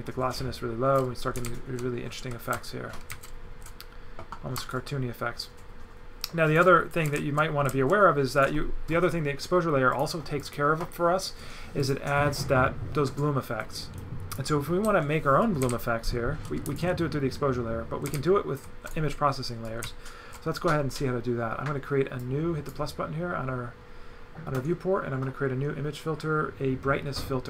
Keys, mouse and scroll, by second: 1.4 right click, 4.7 shift+click, 7.1 right click, 7.7 right click, 7.9 right click, 9.9 click, 10.5 click, 11.8 click, 14.0 click, 15.4 right click, 18.1 right click, 19.7 right click, 22.2 click.